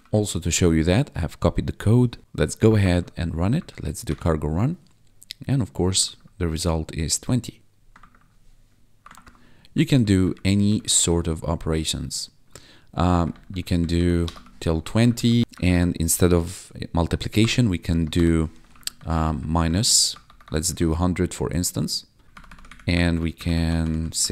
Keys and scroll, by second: 2.2 ctrl+`, 3.5 Up, 4.0 Return, 6.1 1, 8.1 1, 9.1 ctrl+`, 9.7 Up, 10.7 ctrl+Right, 12.3 ctrl+Left, 13.1 Up, 13.2 Right, 14.2 BackSpace, 14.3 2, 14.8 ctrl+s, 15.0 Down, 15.2 Right, 15.6 shift+Left, 17.3 0, 17.8 BackSpace, 18.1 -, 18.6 ctrl+s, 18.9 Right, 19.5 shift+Left, 20.0 1, 20.7 ctrl+s, 22.2 Right, 22.6 Up, 22.9 Down, 23.3 Up, 23.6 ctrl+Right.